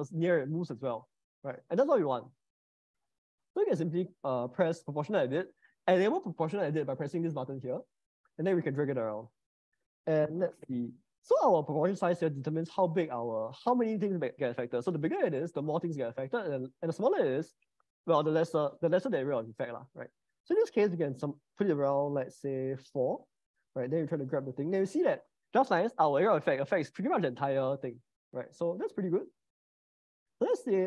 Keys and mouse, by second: 2.2 Escape, 7.9 g, 12.2-22.0 drag, 22.7 click, 24.5 g, 29.5 Escape, 30.3 g.